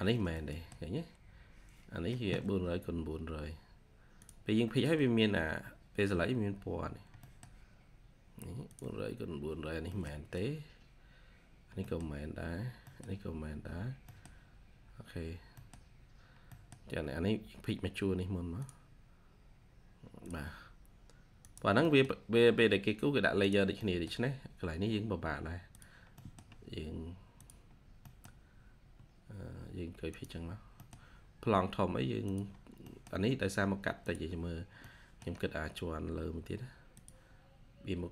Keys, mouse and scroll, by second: 0.3 middle click, 2.1-3.2 scroll down 1, 4.5-5.5 scroll up 1, 6.8 scroll down 1, 7.1 middle click, 7.7-8.7 scroll up 1, 9.7 scroll up 1, 9.8 middle click, 10.0 scroll down 1, 10.7-11.4 scroll up 1, 11.4-11.7 scroll down 1, 11.7 middle click, 12.2 scroll up 1, 12.8 middle click, 13.5-14.0 scroll down 1, 14.0 middle click, 14.4 scroll up 1, 15.0 scroll down 1, 15.3 scroll up 1, 15.5 middle click, 17.4-18.4 scroll up 1, 21.7 middle click, 23.7 middle click, 26.1 middle click, 27.6-28.7 scroll down 1, 28.7 scroll up 1, 30.3 scroll down 1, 30.7 middle click, 31.2-32.2 scroll up 1, 32.4-32.8 scroll down 1, 32.8 middle click, 33.4 scroll up 1, 34.8 middle click, 37.3-38.1 scroll up 1.